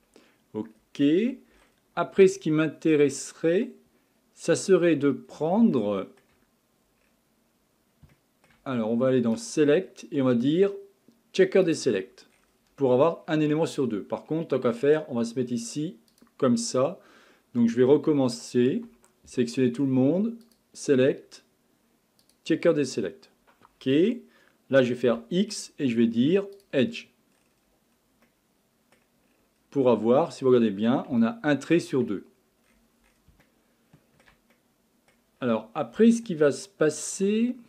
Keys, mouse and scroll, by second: 0.7-1.6 scroll up 2, 1.6-2.3 scroll down 5, 2.3-3.5 shift+middle drag, 3.5-4.8 scroll up 5, 4.8-5.8 scroll down 8, 5.8-7.0 shift+middle drag, 7.0 scroll up 6, 8.1-9.4 shift+middle drag, 9.4-12.3 drag, 12.3-13.2 scroll down 7, 13.2-16.1 scroll up 6, 16.1-19.3 drag, 19.3 a, 20.4-23.5 drag, 25.1 x, 27.3-28.3 scroll down 8, 28.3-29.3 middle drag, 29.3-30.8 scroll up 18, 30.8-31.2 scroll down 3, 31.2-32.2 shift+middle drag, 32.2-32.7 scroll up 2, 32.7-33.4 scroll down 11, 33.4-35.4 shift+middle drag, 35.4-36.0 scroll up 6, 36.0-37.4 shift+middle drag, 37.4-37.6 scroll up 8.